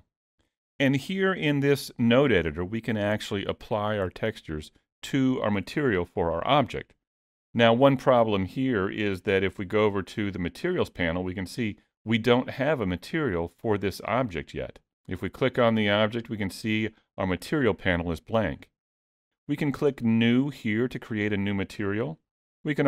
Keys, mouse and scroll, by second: 9.7 click, 12.4 click, 14.9 click.